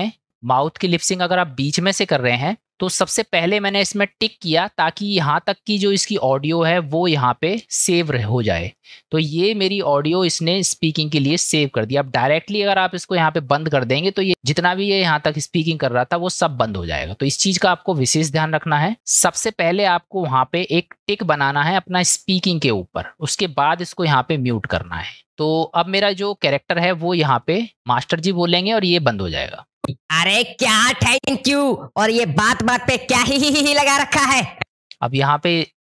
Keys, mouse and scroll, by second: 2.4 click, 3.1-4.9 drag, 18.9 middle click, 25.2 middle click, 27.4 click, 29.8 space, 31.2 space, 34.6 space, 34.7 space, 35.1 click.